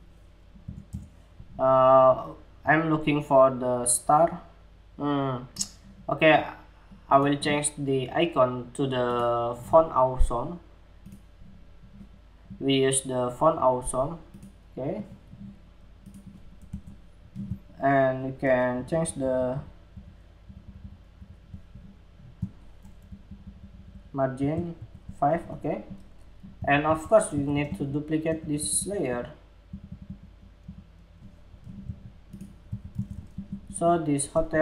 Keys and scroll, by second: 18.2 alt+Up, 18.4 alt+Up, 18.6 alt+Up, 18.7 alt+Up, 18.9 alt+Up, 19.1 alt+Up, 19.5 alt+Up, 20.0 alt+Up, 20.2 alt+Up, 20.3 alt+Up, 20.7 alt+Up, 22.5 alt+Down, 22.8 alt+Down, 23.0 alt+Down, 23.1 alt+Down, 23.3 alt+Down, 23.4 alt+Down, 24.3 alt+Up, 26.3 super+c, 26.9 super+v, 32.2 super+c, 32.5 super+v.